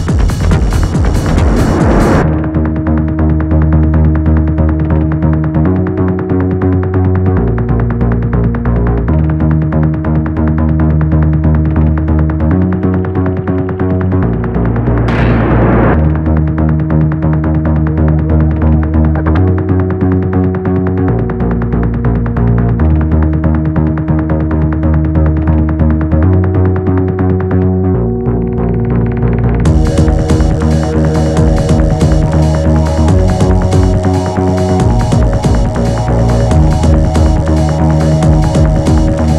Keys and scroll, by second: 2.3 p, 3.7 shift+r, 4.2 Return, 6.2 p, 7.1 4, 14.3 p, 19.8 3, 20.9 3, 25.6 p, 27.2 p, 28.6 p, 29.6 p, 31.1 p, 32.3 p, 33.8 p, 34.9 p, 36.2 p, 37.8 p.